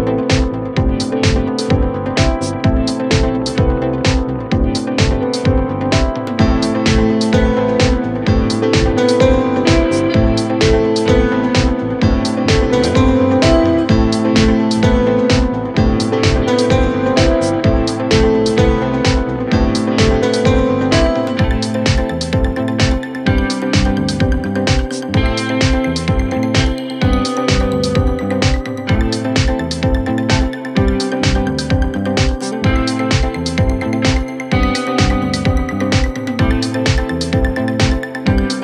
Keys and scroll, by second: 1.9 typing, 3.1-3.8 typing, 5.9-6.7 typing, 8.6-9.5 typing, 27.9-28.7 typing, 31.7-32.5 typing, 34.1-34.8 typing.